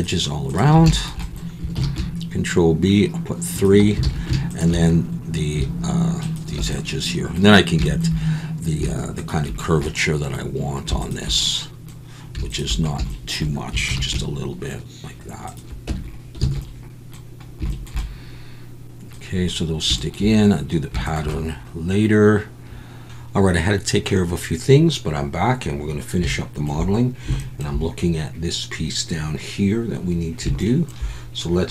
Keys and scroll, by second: 1.8 ctrl+b, 4.0 alt+a, 13.9 ctrl+b, 15.9 Tab, 16.6 alt+a.